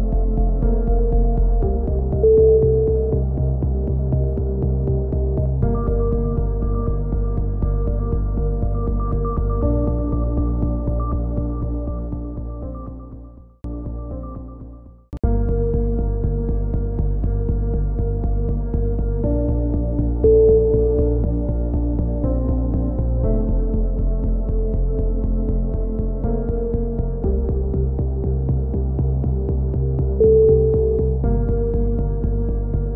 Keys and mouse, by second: 0.5 click, 0.8 KP_3, 1.3 z, 1.8 click, 1.8 z, 2.3 c, 7.8 click, 7.8 right click, 8.6 alt+shift+s, 9.2 ctrl+z, 9.5 c, 9.9 right click, 10.3 alt+shift+s, 10.8 alt+shift+s, 11.3 a, 11.3 z, 11.7 click, 17.2 click, 17.4 KP_3, 19.4 z, 20.1 z, 20.3 click, 21.3-24.2 right drag, 23.8 click, 25.8 click, 25.8 KP_1, 25.9 z, 26.6-27.8 drag, 28.1 a, 28.3 z, 28.5 click, 30.8 KP_3.